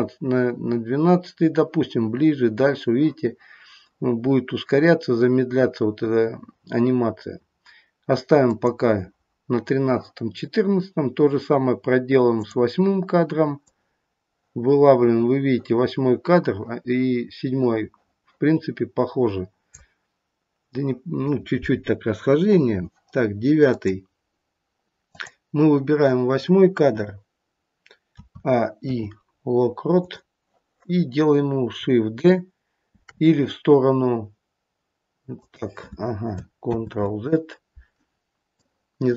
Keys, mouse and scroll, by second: 12.4 click, 13.6 click, 23.6 click, 25.1 click, 28.1 a, 28.7 i, 32.9 shift+d, 36.6 ctrl+z, 38.4 click.